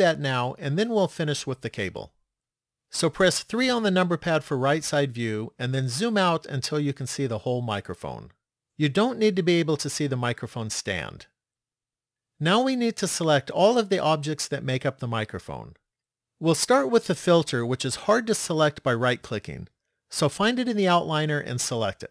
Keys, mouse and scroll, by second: 3.5 KP_3, 4.3-8.0 scroll down 12, 8.7 shift+middle click, 20.6 click.